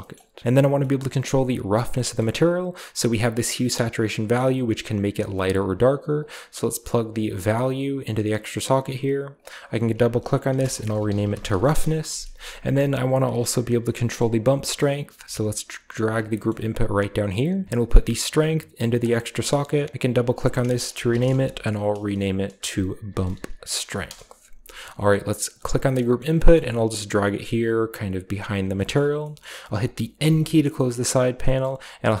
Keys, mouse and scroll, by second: 0.4 scroll down 2, 1.6 middle click, 2.3-3.0 scroll up 1, 4.0-5.4 drag, 5.3 right click, 6.1-8.2 drag, 8.2 middle click, 9.2 middle click, 9.4 middle click, 10.4-12.1 typing, 12.3-13.2 scroll down 1, 13.2-14.3 drag, 13.6-14.5 scroll down 1, 13.7-14.6 middle drag, 14.7 middle click, 14.9-15.6 typing, 15.9 click, 16.5-17.6 scroll up 1, 17.8-19.4 drag, 19.7 click, 19.9 click, 20.1 click, 20.8-24.5 typing, 23.9 Return, 25.1 click, 25.4-27.7 scroll down 1, 25.9 middle click, 26.5-27.2 typing, 28.3 click, 28.9 middle click, 29.3-29.9 middle drag, 30.1 n, 30.8-32.2 middle drag, 31.1-32.2 scroll up 1.